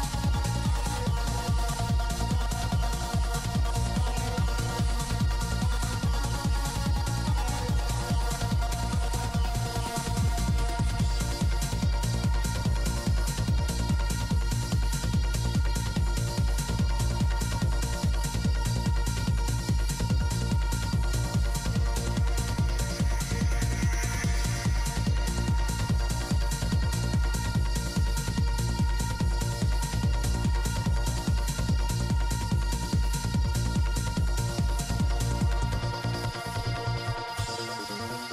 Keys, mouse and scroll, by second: 0.4 middle click, 0.9-2.0 drag, 2.0 middle click, 2.5 click, 3.4 middle click, 4.4 p, 4.4 f, 4.8 f, 5.1 click, 6.7-7.9 drag, 8.2-9.6 middle drag, 9.6 shift+c, 9.7 f, 9.9 middle click, 10.7 click, 10.9 middle click, 11.5 f, 11.7 f, 12.1-13.3 drag, 13.0 shift+f, 13.6-15.4 drag, 15.2 right click, 17.7 p, 17.8 f, 19.0 shift+c, 19.1 f, 20.9 i, 21.0 f, 23.5 shift+c, 23.5 f, 24.3 f, 25.1 f, 28.8-30.6 drag, 29.0 f, 31.0 shift+c, 31.1 f, 31.3 middle click, 31.5 f, 31.8 click, 32.2 f, 32.5 click, 33.6 click, 34.3 click, 35.0 middle click, 35.1 middle click, 36.0 f, 36.6 click, 37.6 p, 37.7-38.3 drag.